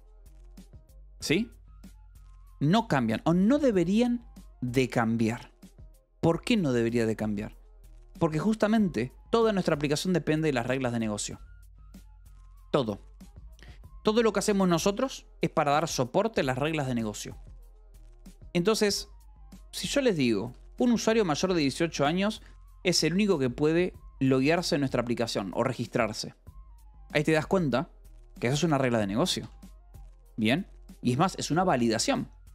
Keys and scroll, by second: 1.6 shift+v, 8.0-10.2 typing, 13.7 Escape, 19.5 e, 21.2 k, 23.3 $, 28.9-29.9 typing, 31.0 Escape.